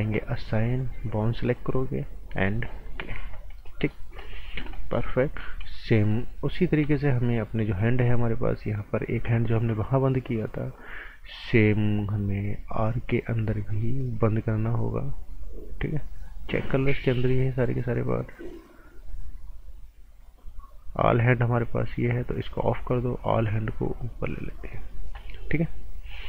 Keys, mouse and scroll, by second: 0.4 click, 3.2 scroll down 1, 3.6 right click, 4.0 scroll down 1, 4.2 right click, 4.6-5.4 scroll up 2, 4.7 right click, 5.6 right click, 6.5 scroll down 1, 13.6 click, 21.6 click.